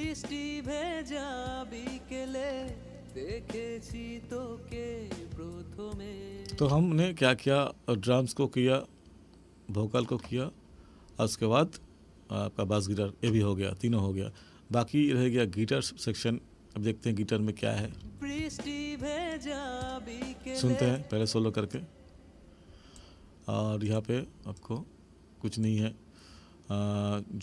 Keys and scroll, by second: 6.5 space, 17.8 space.